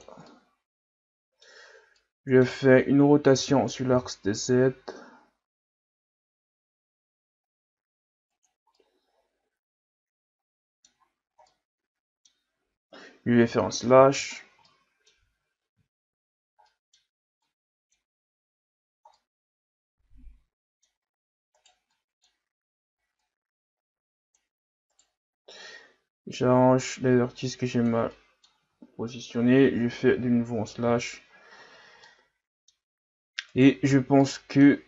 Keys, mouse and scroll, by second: 0.3-2.6 middle drag, 2.6-3.5 scroll up 2, 3.5 r, 8.7-11.0 middle drag, 11.0-11.5 scroll up 4, 11.5-12.5 middle drag, 12.5-13.4 scroll down 1, 13.4 scroll down 2, 13.5 KP_Divide, 14.3-14.7 scroll down 1, 14.7 middle click, 15.4-16.6 scroll up 5, 16.6-18.3 middle drag, 18.3-18.7 scroll up 1, 19.2-21.6 middle drag, 21.6 right click, 21.9-23.2 middle drag, 23.2-24.9 drag, 24.9 right click, 25.6-28.1 drag, 28.1 middle click, 28.6 Tab, 30.0 KP_Divide, 30.8 a, 31.2-32.0 scroll down 3, 32.0-32.9 middle drag, 32.9-33.5 scroll up 1, 33.5 right click, 33.8 Tab, 34.2-34.8 middle drag.